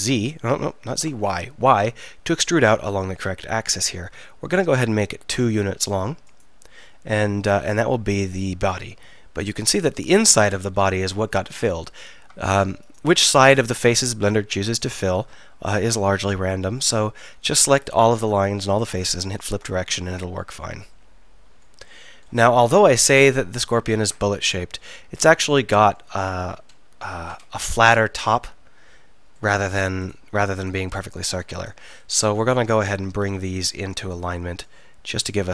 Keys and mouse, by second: 6.5-8.3 drag, 8.3-9.6 middle drag, 9.6-14.7 drag, 14.7-19.1 middle drag, 19.1-20.2 drag, 20.2 middle click, 20.7 click, 20.9 middle click, 22.8 KP_1, 30.1-33.3 middle drag, 32.6 KP_1, 33.0 KP_3, 33.3 KP_1, 33.4 middle click.